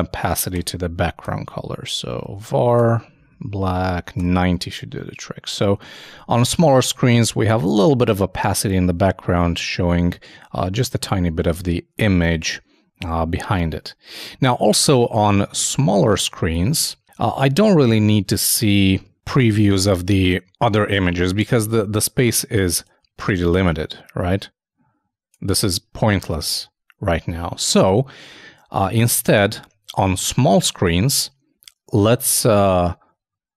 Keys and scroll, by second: 4.4 super+Return, 4.5 super+s, 4.7 super+Tab.